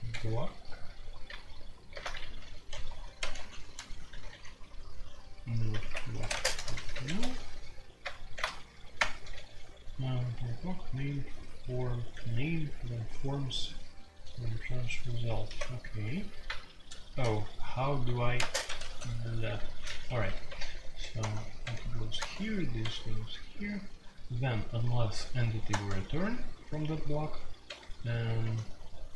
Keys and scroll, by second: 0.1 Escape, 1.9 alt+3, 2.1-4.3 typing, 5.8 alt+1, 5.9-7.1 typing, 7.0 Escape, 8.3 alt+3, 8.7-9.4 typing, 15.4 typing, 18.3-18.8 typing, 20.0-22.1 typing, 21.2 Tab, 22.1 Tab, 25.7 Tab, 27.6 j, 28.4 Tab.